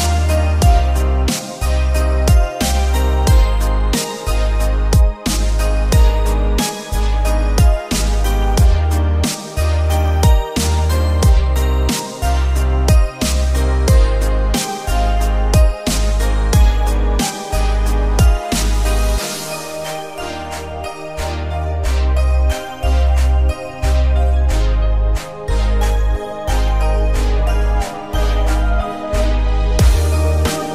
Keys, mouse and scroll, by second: 0.6 z, 2.5 click, 3.3-7.2 drag, 8.5-9.3 shift+middle drag, 10.2 shift+click, 11.9-14.4 typing, 14.7 Return, 16.1 shift+r, 16.5 shift+r, 17.9 shift+r, 19.6 click, 20.2 click, 21.0 Delete, 22.0 click, 26.6 click, 27.3 Tab, 27.9-28.2 scroll down 1, 28.3 middle click, 29.7 click, 30.2 alt+click.